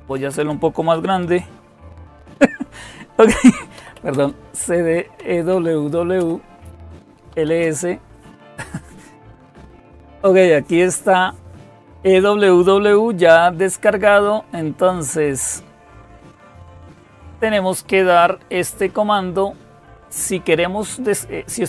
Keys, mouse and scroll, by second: 0.0-0.2 typing, 1.6 ctrl++, 2.0 ctrl++, 3.4-5.0 typing, 5.3 Tab, 6.0 Return, 6.9-7.6 typing, 14.8 click, 16.3-16.9 scroll down 1, 16.9-17.8 scroll down 1.